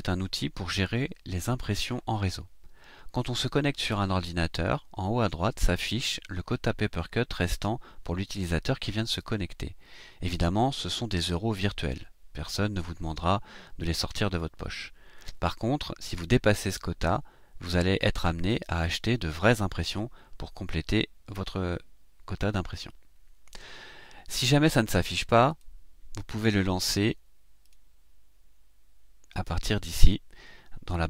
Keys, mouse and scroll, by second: 25.4 click, 27.6 click.